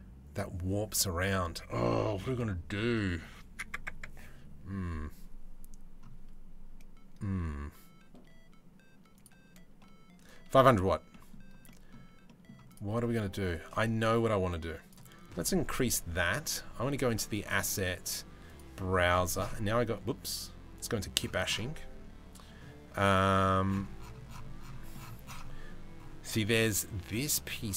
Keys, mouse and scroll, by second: 2.5 middle click, 10.7 middle click, 11.2 middle click, 11.8 middle click, 12.3 click, 12.6 middle click, 14.1 click, 15.3-18.2 drag.